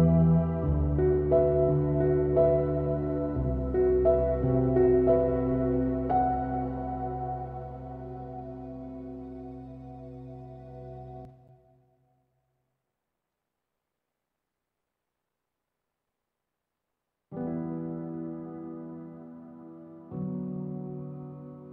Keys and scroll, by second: 13.1 Return, 13.2 Return, 13.7 super+=, 15.0 super+=.